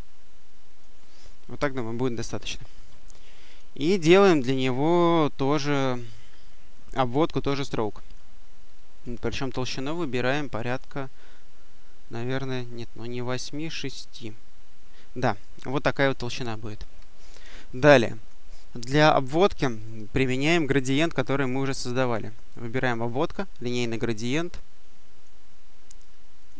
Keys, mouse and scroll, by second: 1.5 click, 3.3 click, 5.5-7.5 drag, 8.5 right click, 10.5 click, 12.8 right click, 13.6 click, 15.9 click, 19.7 click, 22.6 click, 25.0 click, 26.3 click.